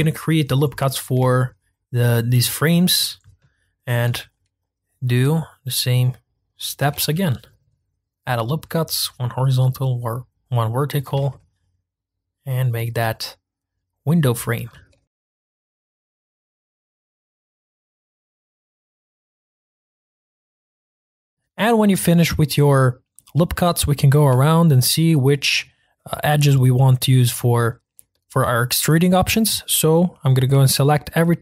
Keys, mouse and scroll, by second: 0.7-1.2 scroll up 2, 1.3-4.0 shift+middle drag, 4.0 ctrl+r, 6.9 ctrl+r, 11.1 ctrl+r, 14.7 ctrl+r, 15.2 ctrl+z, 15.2 ctrl+r, 15.8 middle click, 16.3 scroll down 1, 16.3 shift+middle click, 16.5 ctrl+r, 16.9 middle click, 17.1 ctrl+r, 17.5 shift+middle click, 18.0 scroll down 2, 18.2 shift+middle click, 18.4-18.8 scroll up 2, 18.6 middle click, 18.8 ctrl+r, 19.1 ctrl+r, 19.4 ctrl+r, 19.7 ctrl+r, 20.0 ctrl+r, 20.3 ctrl+r, 20.6-21.2 scroll down 2, 20.7 middle click, 20.9 Tab, 21.0 shift+middle click, 21.2 scroll up 1, 21.3-23.9 shift+middle drag, 23.9-24.5 scroll up 1, 24.5-30.3 shift+middle drag, 30.3 click, 30.8 shift+click.